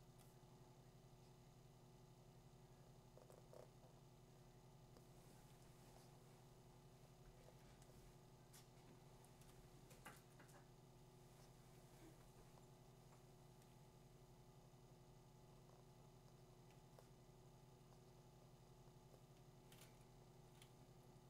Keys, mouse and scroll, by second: 0.2 click, 5.8 click, 9.4 click.